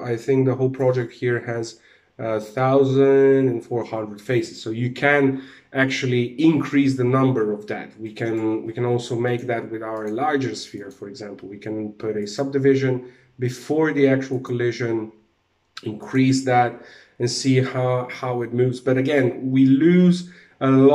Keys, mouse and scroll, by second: 7.7 right click, 8.7 click, 9.4 click, 11.7 click, 13.8 click, 14.5-15.5 scroll down 2, 15.5 click, 16.2 alt+a.